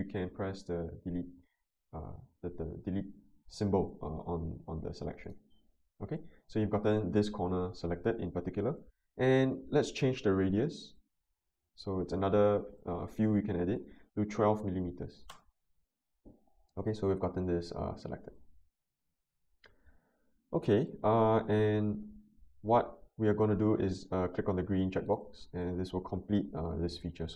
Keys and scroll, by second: 14.3-14.8 typing, 15.3 Return.